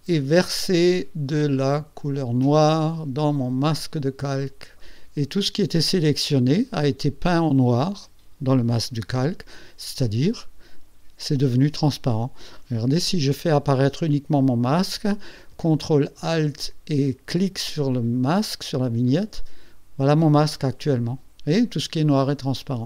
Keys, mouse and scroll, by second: 2.1-4.0 drag, 19.1 ctrl+alt+click, 22.4 ctrl+alt+click.